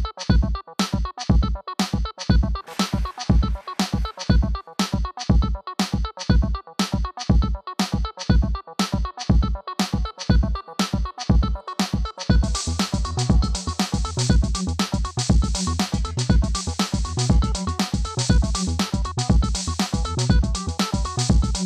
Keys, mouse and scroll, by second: 6.5 click, 7.4 typing, 8.4 Return, 9.7 scroll down 1, 12.6 click, 15.1 click, 15.4 click, 15.4-16.4 typing, 17.2 Return, 20.0 click.